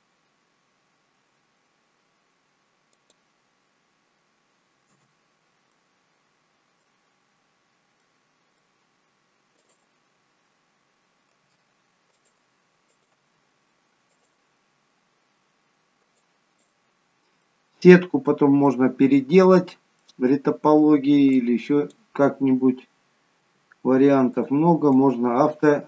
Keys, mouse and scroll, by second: 5.6 middle click, 8.0 middle click, 9.5 click, 11.4 g, 12.8 click, 13.2 g, 14.6-15.9 scroll down 1, 16.2 click, 17.3-18.6 scroll down 3, 18.6 middle click, 19.6-20.0 scroll down 2, 20.0 middle click, 21.3 click, 23.3 g, 25.0 click.